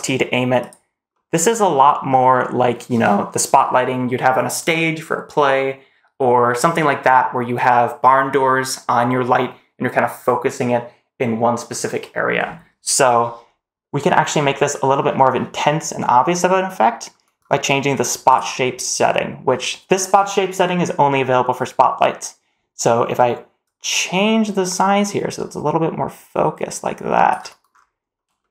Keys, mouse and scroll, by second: 1.0-1.8 middle drag, 1.9 scroll down 2, 2.0 scroll up 1, 2.3 middle click, 13.6-14.1 scroll up 2, 14.1-14.6 middle drag, 14.7-16.5 scroll down 2, 16.5 middle click, 17.8 click, 18.1 click, 23.5-27.1 drag, 27.5-27.9 scroll up 3, 28.2 shift+middle drag.